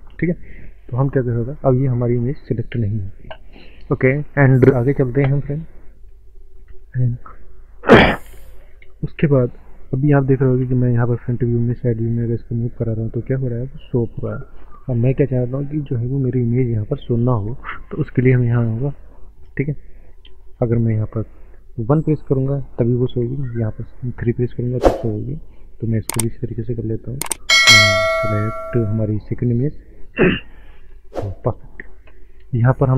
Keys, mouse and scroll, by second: 1.4 click, 2.1 middle click, 2.8 click, 2.8 click, 3.1 click, 4.8 click, 6.8 n, 7.5 scroll up 1, 7.6 middle click, 7.8 middle click, 10.6 KP_1, 11.5 middle click, 12.1 shift+middle click, 15.6 click, 15.7 click, 16.4 click, 17.3 click, 19.2 click, 19.8 middle click, 19.9 middle click, 22.4 KP_1, 23.2 KP_3, 25.9 click, 26.8 middle click, 27.4 middle click, 27.8 click, 28.0 click, 29.8 click.